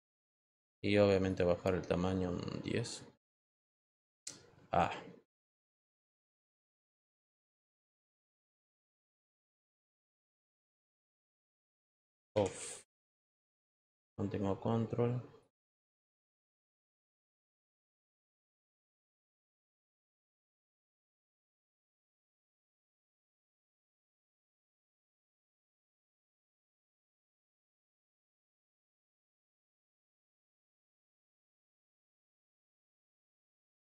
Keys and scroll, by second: 6.8 ctrl+z, 7.7 ctrl+z, 12.1 f.